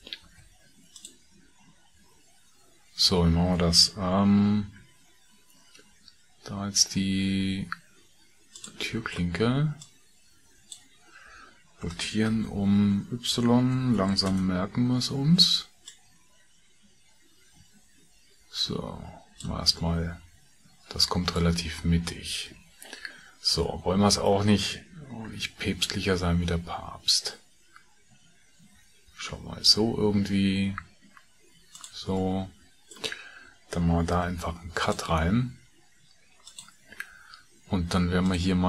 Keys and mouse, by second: 0.2 shift+a, 4.7 s, 34.1 ctrl+r.